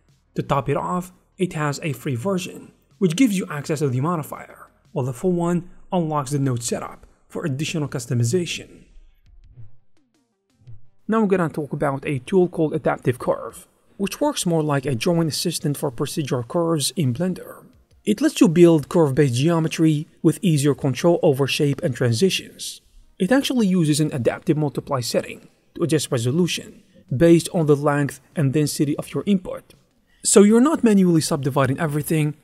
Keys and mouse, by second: 0.3 e, 1.3 click, 1.4 Tab, 1.5 click, 1.5 g, 2.1 g, 2.6 click, 3.5 Tab, 3.5 a, 3.7 v, 3.9 click, 4.3 click, 4.6 shift+click, 5.2-7.0 typing, 7.5 click, 7.7 ctrl+shift+middle click, 8.6 shift+click, 10.2 click, 11.2 shift+middle click, 12.1 click, 16.1 click, 16.5-18.0 drag, 18.2 click, 18.7 click, 19.2 middle click, 19.4 shift+click, 19.5 middle click, 20.1 click, 21.1 click, 21.3 Tab, 21.4 1, 21.6 click, 22.4 click, 24.5 alt+s, 25.6 Tab, 25.8 click, 26.7 shift+click, 27.5 click, 27.7 click, 28.6 click, 29.3 z, 30.1 click, 30.8 click, 31.0 click, 31.2 click, 31.7 click.